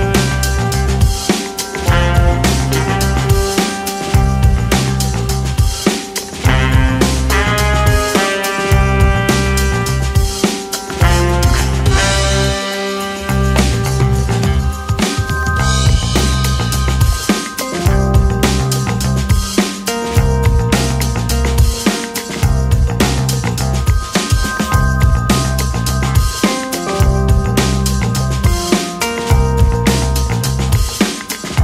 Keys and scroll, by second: 10.3 f, 18.3 ctrl+c, 18.4 ctrl+v, 22.6 ctrl+v, 23.5 ctrl+shift+v, 26.1 s.